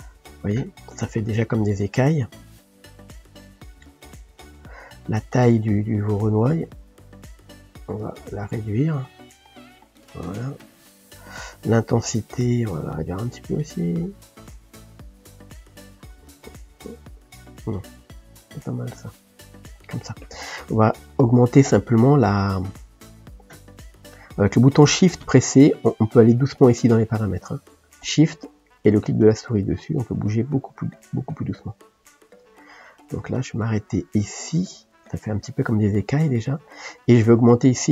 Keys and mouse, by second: 13.0-20.0 drag, 26.0 click, 28.9-32.6 shift+drag.